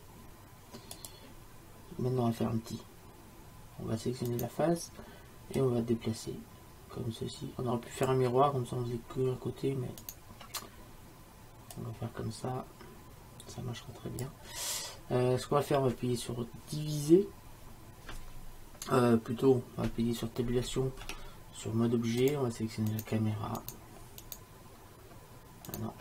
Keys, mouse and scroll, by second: 4.4-5.7 right drag, 6.3-8.1 drag, 10.1-11.8 right drag, 11.8-13.6 drag, 21.1 Tab, 24.2 right click.